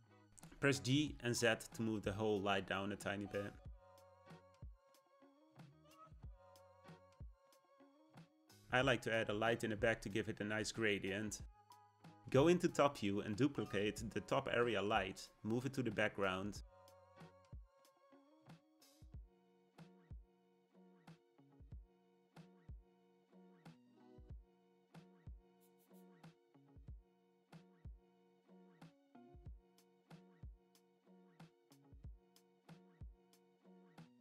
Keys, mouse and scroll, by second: 2.1 g, 11.0 click, 12.7 KP_7, 16.2 shift+d, 21.9 KP_0, 23.0 g, 32.8 click, 33.9 click.